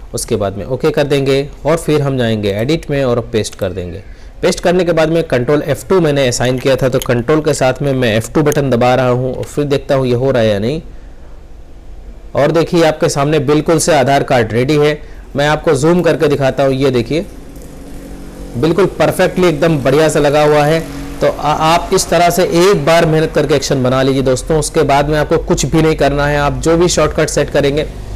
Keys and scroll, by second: 9.1 ctrl+F2.